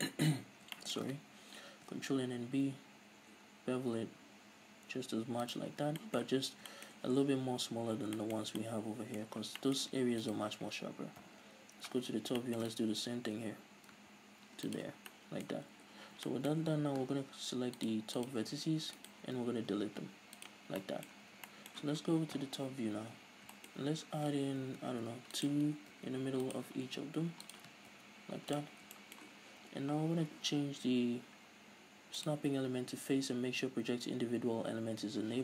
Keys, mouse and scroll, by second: 1.7 ctrl+b, 5.6 click, 5.8 scroll down 2, 6.0-6.3 shift+middle drag, 6.6-10.2 middle drag, 9.4 scroll down 2, 10.2 right click, 11.2 KP_7, 11.9 scroll up 1, 12.4-14.4 shift+middle drag, 13.2 ctrl+b, 14.7 shift+click, 14.9 scroll down 1, 15.1-15.7 middle drag, 15.7 scroll down 1, 16.0 z, 16.2-17.8 middle drag, 17.8 click, 18.9 alt+right click, 19.3 x, 20.8-23.1 middle drag, 21.2 a, 22.3 KP_7, 23.2 scroll up 1, 23.7-24.1 shift+scroll up 2, 24.6 ctrl+r, 25.4 click, 25.9 ctrl+r, 26.5 click, 26.8 ctrl+r, 27.5 click, 27.8 middle click, 27.9 ctrl+r, 28.6 click, 28.9-32.2 shift+middle drag, 31.1-32.0 scroll down 2, 32.0 scroll down 1, 32.2-35.4 drag.